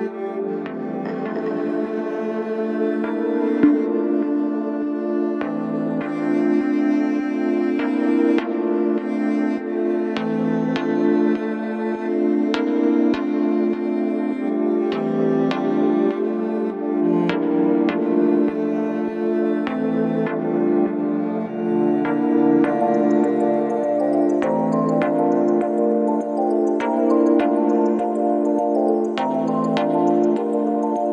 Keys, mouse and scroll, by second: 26.4 ctrl+-.